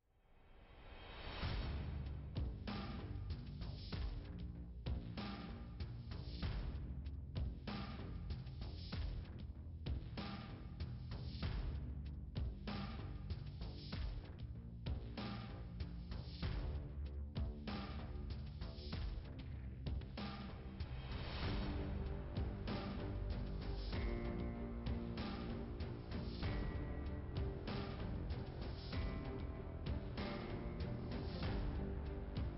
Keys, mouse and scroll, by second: 0.1 click, 0.7 scroll down 2, 1.3 click, 1.3 click, 2.9 middle click, 3.7-4.4 scroll up 1, 5.4 click, 6.2 click, 6.7-7.1 scroll down 2, 9.1 click, 14.0 scroll up 2, 14.9 right click, 15.0 scroll up 1, 15.1 right click, 15.6 scroll down 3, 17.3 click, 19.9 click, 21.1 click, 22.6 click, 25.5 click, 26.6 click, 27.6 click, 28.6 click, 29.3 click, 30.5 click, 30.8 click, 32.0 click.